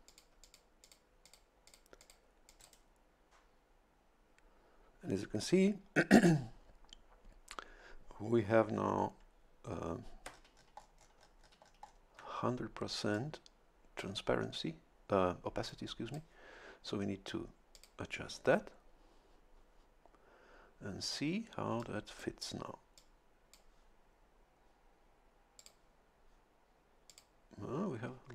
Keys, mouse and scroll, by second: 0.1 click, 0.4 click, 0.8 click, 1.2 click, 1.7 click, 2.0 click, 2.5 click, 13.1-14.2 drag, 15.7 click, 17.7 click, 21.8 click, 23.0-24.0 drag, 25.6 click, 27.1 click.